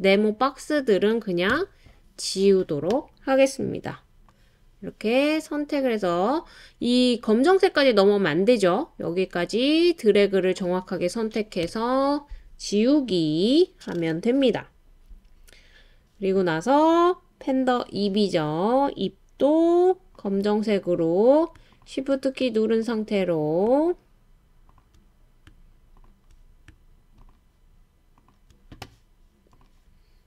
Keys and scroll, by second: 1.5 BackSpace, 11.6 BackSpace.